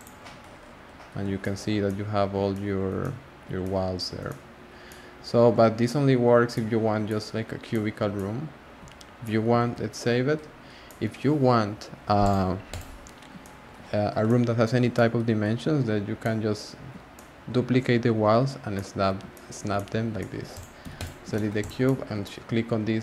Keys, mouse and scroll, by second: 0.0 click, 0.2 scroll up 2, 0.2 scroll down 2, 0.5-1.4 scroll up 6, 1.4-5.9 shift+middle drag, 5.9-6.5 scroll down 2, 6.5-7.3 middle drag, 7.3-7.7 scroll down 2, 7.7-8.9 middle drag, 8.9 scroll up 1, 8.9 scroll down 3, 9.2 middle drag, 9.6 s, 10.3-10.8 scroll down 3, 10.8-12.2 middle drag, 12.2-13.4 drag, 13.4 shift+middle click, 13.9-14.2 scroll up 3, 14.2-15.4 middle drag, 15.4 scroll up 1, 15.4 scroll down 1, 15.5-16.2 scroll up 4, 16.2-20.5 middle drag, 20.5 click, 20.8 x, 21.3 shift+middle click, 21.6 click, 21.8 scroll down 1, 21.8-23.0 middle drag.